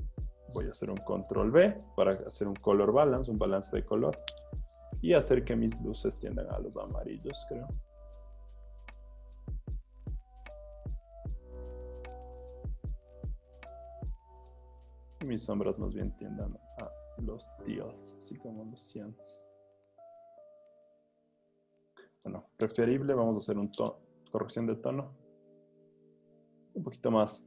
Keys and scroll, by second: 1.0 super+b, 23.4 super+u.